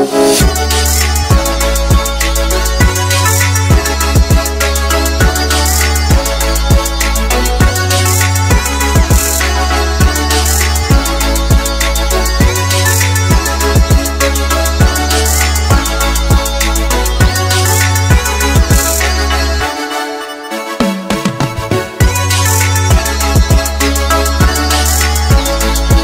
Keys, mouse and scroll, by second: 0.2 click, 1.5 click, 4.3 drag, 5.6 click, 8.8 click, 10.0 click, 11.6-12.3 middle drag, 12.5-14.0 scroll up 3, 14.0 g, 14.5 x, 20.0 click, 20.6 r, 21.3 z, 24.0 click, 24.4 g, 24.9 x, 25.2 x, 25.7 y.